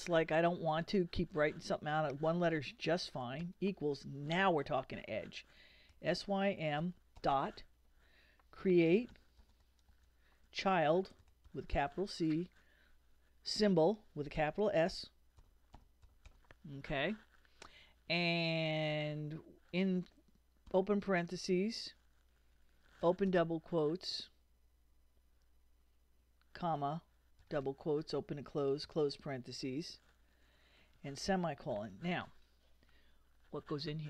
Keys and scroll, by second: 3.4 =, 5.7-7.2 typing, 8.5-12.4 typing, 14.4-16.8 typing, 20.7 shift+9, 23.0 shift+', 26.6 shift+,, 27.4 shift+', 28.8 shift+0.